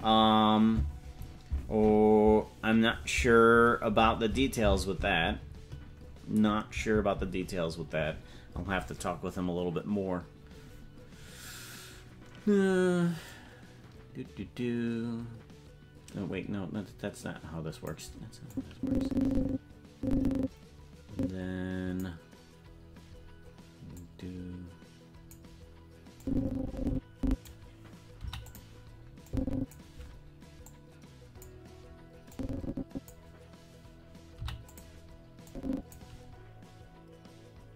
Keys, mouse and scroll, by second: 13.2-17.9 drag, 18.5-22.0 drag, 23.9-25.3 drag, 26.2-27.4 drag, 28.1 i, 29.2 click, 30.6 click, 32.3 click, 34.3 i, 35.4 click.